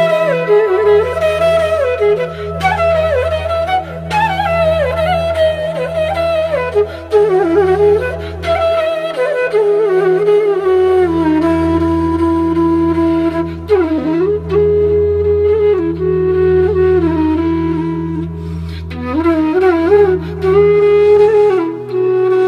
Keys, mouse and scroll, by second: 0.0-0.1 typing, 0.7 click, 3.4 alt+scroll up 1, 5.2 click, 8.1-8.7 typing, 8.8 right click, 9.5 click, 10.7 ctrl+z, 12.1-17.1 drag, 18.1 right click, 18.7 click, 20.4-21.0 typing, 21.1-22.4 drag.